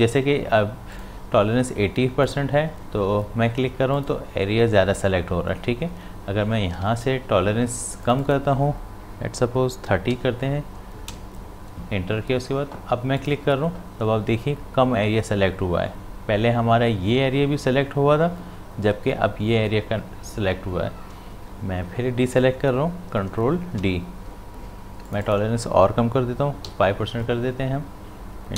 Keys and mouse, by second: 6.7 click, 6.9 z, 8.0 click, 13.2 click, 21.9 click, 23.7 ctrl+d, 25.1 click.